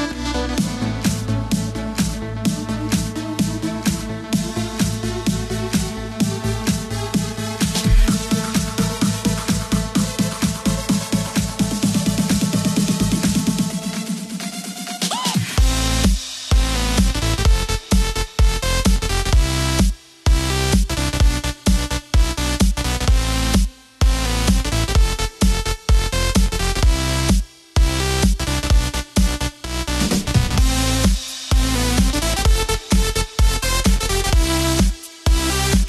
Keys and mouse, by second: 0.6 click, 1.9 click, 2.9 BackSpace, 3.6 KP_2, 3.8 KP_4, 7.0 Tab, 7.8 middle click, 10.8 r, 12.1 x, 13.8 KP_9, 14.3 KP_0, 16.2 KP_3, 22.8 s, 24.3 click, 27.4 shift+middle click, 30.1 g.